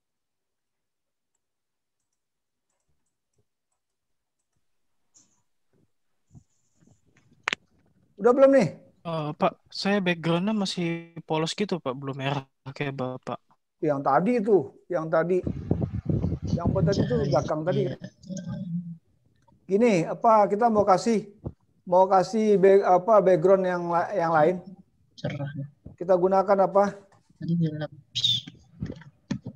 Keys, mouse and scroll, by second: 5.1 middle click, 5.1 click, 5.1 scroll down 4, 6.3 click, 6.3 right click, 6.3-7.0 scroll up 7, 10.2 middle click.